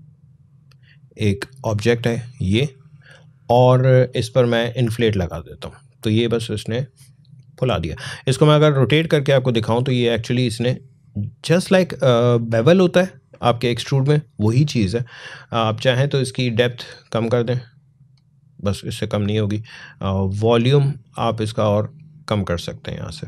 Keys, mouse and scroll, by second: 2.4 click, 9.7-16.1 drag, 16.9-23.2 drag.